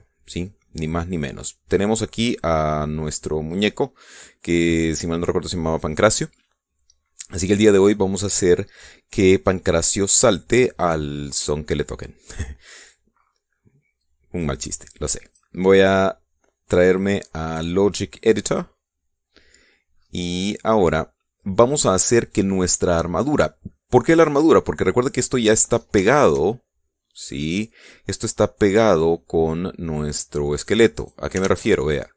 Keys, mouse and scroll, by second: 0.7 shift+scroll down 2, 1.1-7.2 middle drag, 14.6-16.2 drag, 17.4 click, 19.2 click, 20.6-21.2 scroll up 2, 21.6-22.8 middle drag, 22.8 click, 26.8-30.8 shift+drag, 31.3 right click, 31.7 right click.